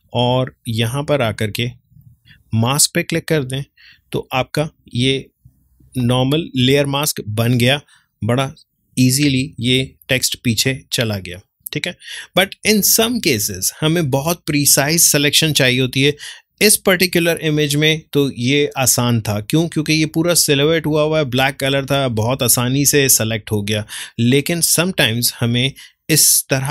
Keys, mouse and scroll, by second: 4.4 ctrl+space, 4.7 ctrl+click, 5.0 ctrl+space, 7.5-9.4 drag, 9.4 ctrl+space, 9.7 ctrl+click, 9.9 ctrl+space, 20.7 space, 21.2-26.3 ctrl+drag.